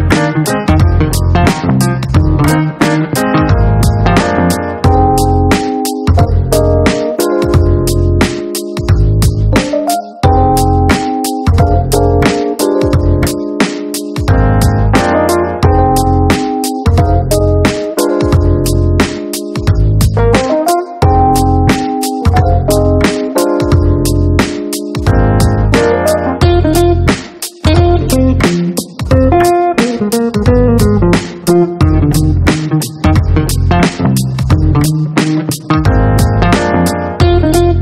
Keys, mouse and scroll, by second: 0.3 click, 5.0 click, 7.0 click, 10.0 right click, 12.8 right click, 14.4 right click, 15.3 click, 19.3-22.0 drag, 22.8 click, 23.4 click, 24.8 click, 28.9 click, 36.0 click.